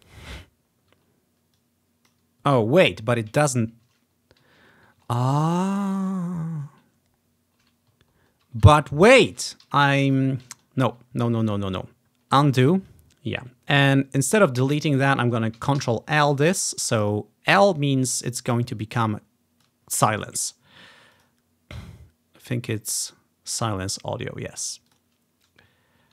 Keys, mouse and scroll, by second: 1.6-3.2 drag, 3.2 scroll up 1, 3.5-3.9 ctrl+scroll down 1, 3.9 ctrl+z, 4.5 ctrl+z, 5.2-6.0 ctrl+scroll up 3, 6.2-6.8 ctrl+scroll down 1, 6.8 ctrl+scroll up 2, 7.3-8.2 ctrl+scroll down 3, 9.3 ctrl+z, 9.7 ctrl+z, 10.1 ctrl+z, 10.5 ctrl+z, 11.5-12.0 ctrl+scroll up 1, 12.0 ctrl+z, 12.0 scroll down 1, 12.3 ctrl+scroll up 1, 15.9 ctrl+l, 18.4-24.3 drag, 24.9-26.1 drag, 25.9 ctrl+scroll down 3.